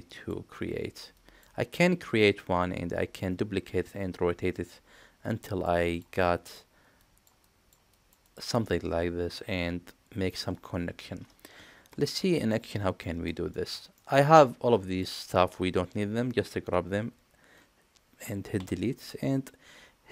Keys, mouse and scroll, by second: 12.2 middle click, 13.0 middle drag, 13.5 shift+middle click, 13.9 middle click, 14.7 click, 18.6 Delete.